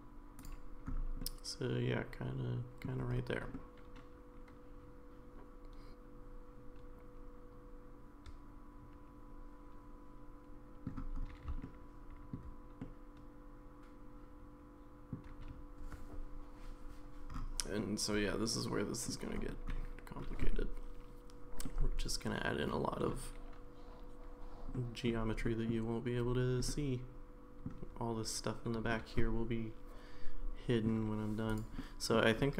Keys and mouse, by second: 1.2-2.9 middle drag, 3.6-10.9 middle drag, 11.6 shift+middle click, 12.8-15.1 middle drag, 17.8-19.1 middle drag, 21.6-23.1 middle drag, 24.7 middle click, 25.4 middle click, 26.7-27.7 middle drag, 28.9-30.9 middle drag, 31.8 middle click, 32.4 middle click.